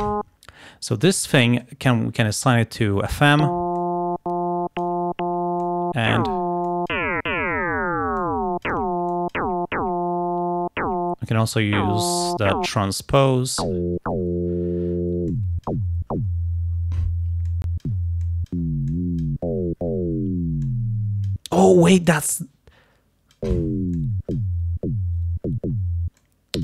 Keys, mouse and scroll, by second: 1.7-3.4 drag, 3.8-5.1 drag, 5.7 click, 6.7 click, 8.3 click, 9.2 click, 12.9 click, 15.4 click, 17.5 click, 18.3 click, 18.9 click, 20.7 click, 21.8-23.6 drag, 24.0 click, 26.2-26.6 drag.